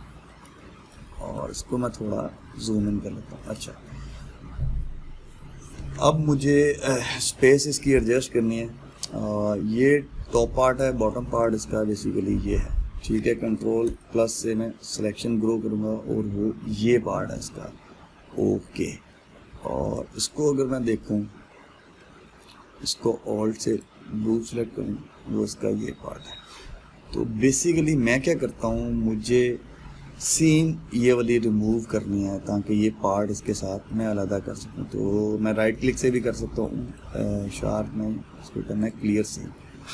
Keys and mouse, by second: 11.2 middle click, 12.0 click, 14.5 ctrl+KP_Add, 19.1-20.5 middle drag, 20.5 click, 21.0-24.4 middle drag, 24.4 alt+click, 26.0-29.7 middle drag, 32.5 click, 36.8-39.9 right drag.